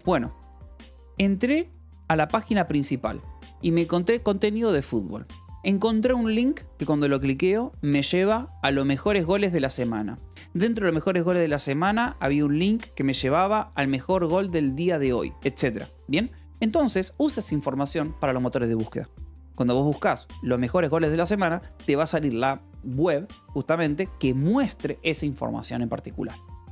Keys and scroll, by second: 17.0 Escape, 23.7 k.